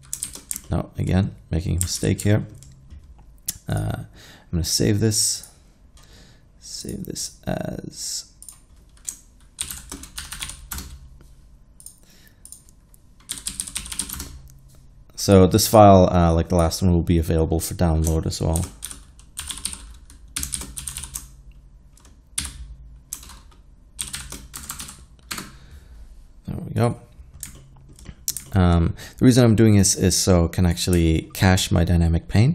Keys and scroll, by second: 0.3 shift+z, 2.0 alt+a, 9.7-10.5 typing, 10.8 Return, 13.4-14.1 typing, 14.2 Return, 18.7-21.4 typing, 22.4 typing, 24.1-25.1 typing, 25.4 Return.